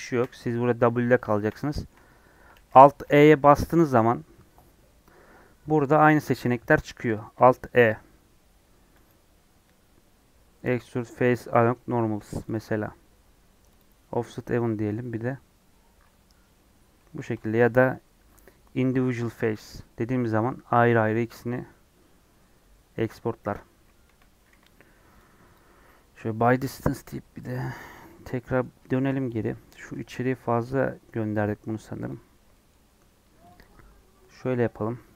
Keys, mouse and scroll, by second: 0.1 w, 1.4-1.7 scroll up 2, 1.7-9.0 shift+middle drag, 9.0 alt+e, 13.6-17.0 drag, 17.0 ctrl+z, 19.6 alt+e, 24.0 a, 25.5 m, 27.5 click, 27.9 middle click, 28.5 scroll up 2, 28.9 shift+middle click, 29.3 click, 29.4 middle click, 29.7 g, 32.3 scroll down 1, 32.5 middle click, 33.0 scroll up 1, 33.4 click, 33.6 scroll up 2.